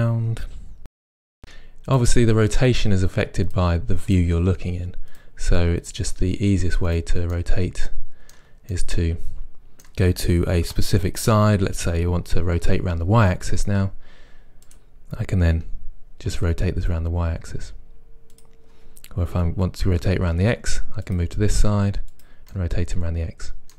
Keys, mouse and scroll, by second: 0.0 KP_7, 0.7 r, 1.0 click, 1.4 r, 2.5 click, 2.8 r, 4.1 click, 4.5 r, 5.2 click, 5.8 click, 6.1 r, 7.0 click, 7.3-14.7 middle drag, 10.7 KP_1, 14.7 drag, 15.6 r, 18.5 click, 19.4 KP_3, 21.1 click, 21.6 r, 22.3 click, 22.5-23.7 middle drag.